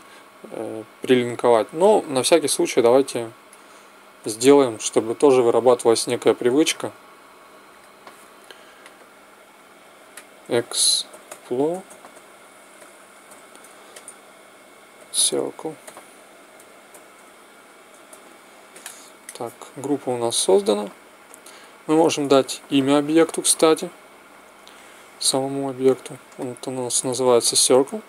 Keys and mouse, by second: 5.1 ctrl+g, 6.7 t, 7.6 click, 8.6 click, 11.7 s, 21.3-23.5 drag, 22.6 n, 24.4-26.5 drag.